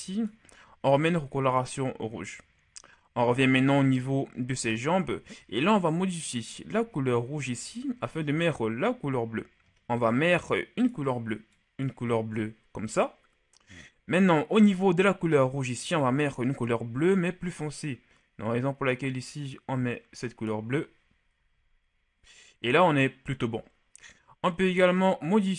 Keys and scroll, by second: 21.5 a.